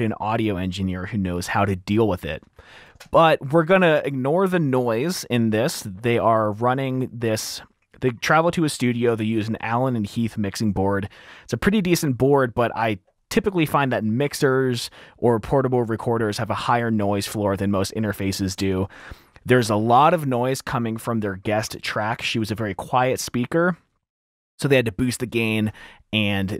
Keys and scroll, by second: 3.2 r, 19.0 t.